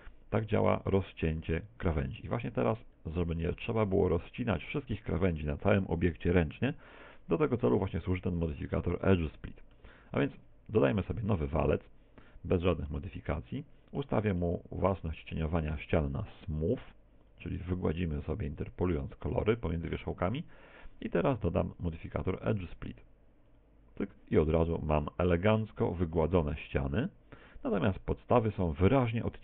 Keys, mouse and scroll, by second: 0.1 middle click, 2.4-3.3 scroll down 11, 3.3 middle click, 4.1 middle click, 7.1 middle click, 8.7 middle click, 10.9 x, 11.5 shift+a, 13.5 middle click, 14.5 middle click, 17.3 click, 21.8 click, 24.8 middle click, 27.8 middle click.